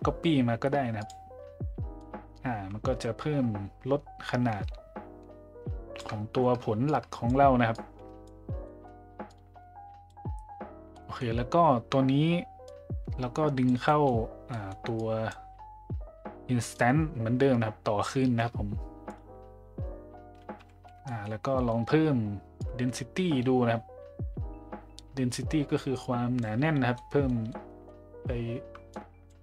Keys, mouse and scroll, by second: 2.1-6.0 drag, 6.9 click, 7.8 click, 8.6 middle click, 9.3-10.2 drag, 10.9 middle click, 12.7-13.7 drag, 13.9 middle click, 14.6 middle drag, 15.0-15.3 drag, 16.7-19.1 drag, 21.1 middle click, 21.6 middle click, 22.6-26.5 drag, 26.9-27.2 middle drag, 27.5-27.8 middle drag, 28.9 click.